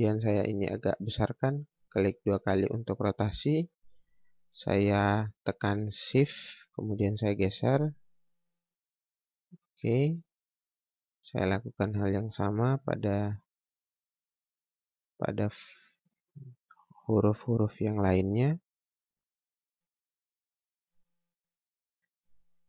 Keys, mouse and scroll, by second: 0.0 scroll up 1, 0.5 scroll down 1, 1.8 click, 4.3 click, 10.5 scroll down 1, 11.2 click, 16.5 scroll up 1, 16.9 click, 17.2 scroll down 1, 17.7 click.